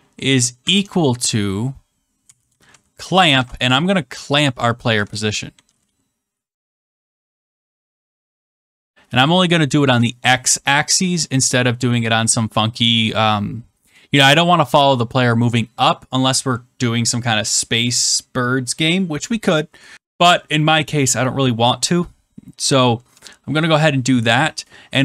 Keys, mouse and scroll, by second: 0.6 =, 1.9-3.3 typing, 4.6-8.9 typing.